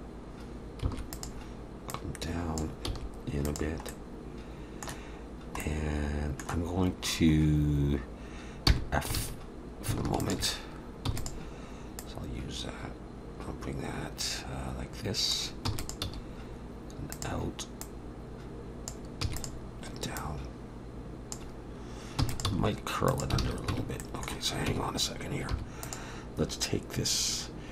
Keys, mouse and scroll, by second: 1.9 click, 2.9 s, 3.9 middle click, 7.4 middle click, 7.4-8.7 scroll up 1, 8.7-9.1 scroll up 1, 8.7 f, 9.2 alt+a, 10.2 alt+shift+click, 11.1 e, 12.0 click, 16.0 e, 16.0 s, 17.8 click, 19.3 e, 20.2 click, 22.2 e, 22.5 s, 23.4 alt+a, 23.7 Tab, 24.0 middle click, 24.7 Tab, 25.5 3, 25.8 click.